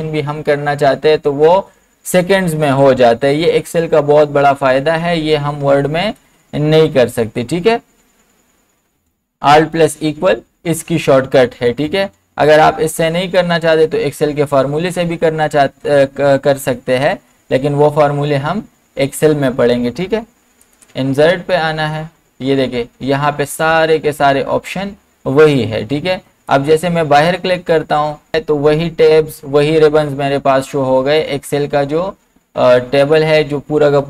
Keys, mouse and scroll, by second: 6.2 click, 6.2-9.8 drag, 12.6 click, 20.7 click, 26.5 click.